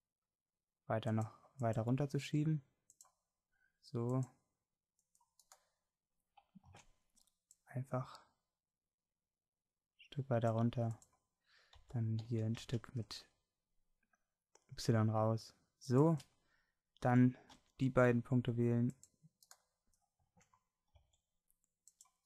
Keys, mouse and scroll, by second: 5.5-6.8 drag, 6.8 ctrl+z, 11.8 s, 16.6 middle click, 17.1 a, 17.6 c, 21.0 c.